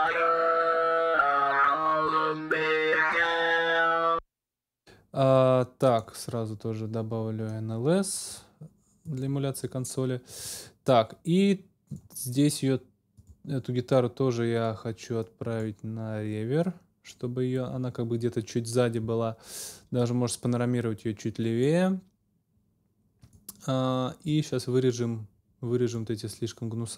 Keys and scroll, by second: 3.9 space.